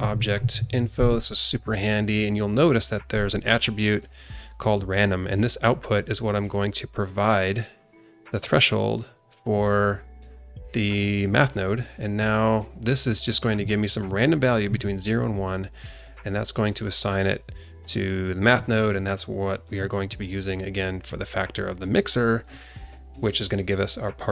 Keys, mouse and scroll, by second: 1.8 scroll up 2, 4.0 click, 5.5-6.4 scroll up 1, 6.4-10.3 drag, 10.7 click, 12.6 click, 13.6 alt+shift+middle click, 16.0 click, 17.8 click, 18.2 scroll down 1, 18.9 alt+shift+middle click, 20.0-20.8 scroll up 3, 21.5 click, 22.9 click.